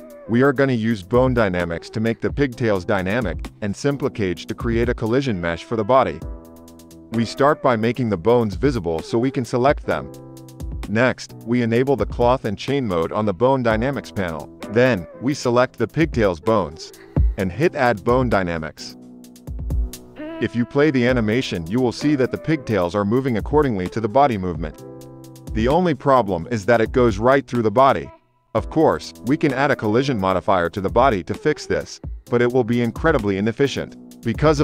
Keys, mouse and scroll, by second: 6.9 space, 11.8-34.6 drag, 22.5 shift+Left, 23.3 space, 24.6 space, 25.0 space, 27.3 shift+Left, 27.9 space, 29.3 space, 29.6 space, 32.0 shift+Left, 32.5 space, 33.9 space, 34.2 space.